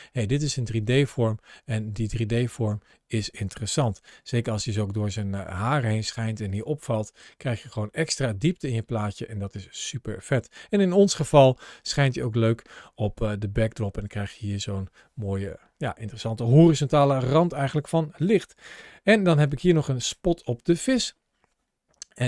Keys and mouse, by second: 3.9 shift+middle click, 5.1 shift+middle click, 9.0 shift+middle click, 11.0 ctrl+shift+a, 17.1 shift+middle click.